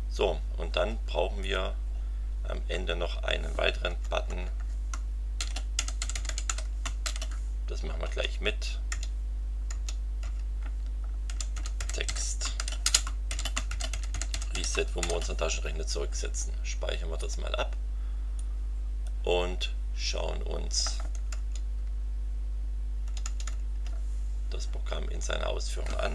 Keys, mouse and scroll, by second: 0.5-1.4 scroll up 1, 1.4 click, 1.9 scroll down 1, 2.7 Return, 3.8 Tab, 5.1-7.0 typing, 8.0 Return, 8.9 Tab, 9.7 Tab, 11.0-15.5 typing, 17.2 click, 18.4-19.2 drag, 21.3 alt+Tab, 23.0 alt+Tab.